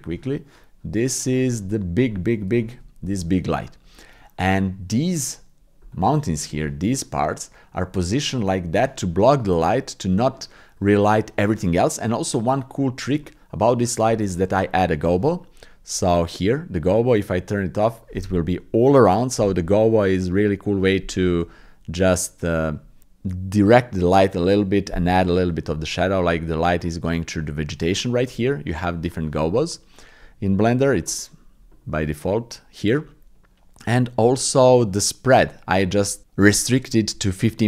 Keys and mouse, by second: 1.1 click, 1.7 shift+click, 2.2 click, 2.7 shift+click, 3.3-4.9 drag, 5.2 click, 6.6 shift+click, 7.0 click, 7.8-11.5 drag, 12.6 click, 13.3 click, 17.2 click, 21.6 ctrl+z, 29.9-32.8 drag.